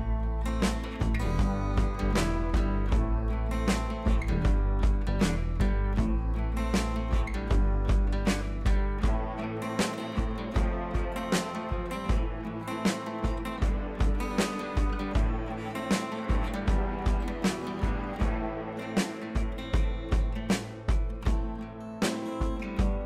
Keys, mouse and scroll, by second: 0.9 ctrl+z, 1.3 click, 2.4 right click, 3.2 click, 4.5 ctrl+c, 5.3 click, 7.0 ctrl+v, 8.1 click, 8.6 right click, 9.1 click, 10.7-13.2 alt+drag, 15.8 scroll up 1, 16.8 click, 17.8 ctrl+t, 17.9 right click, 19.3 click, 20.7 scroll down 1, 21.1-22.3 drag, 22.3 alt+click.